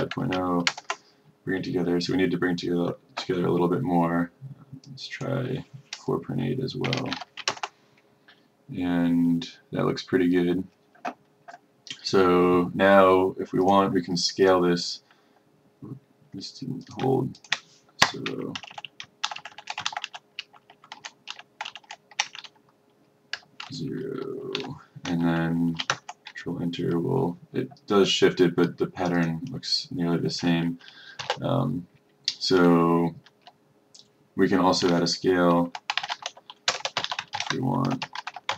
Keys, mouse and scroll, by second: 0.1 KP_0, 0.8 Return, 5.0 click, 7.0 KP_4, 7.2 KP_8, 10.7 Return, 13.8 click, 17.5 shift+click, 18.1 KP_0, 18.6 Left, 18.8 Left, 19.4 shift+Left, 19.5 shift+Left, 21.4 ctrl+shift+Left, 23.4 KP_0, 24.6 End, 26.7 Return, 29.2 click, 31.4 space, 35.5-38.4 typing.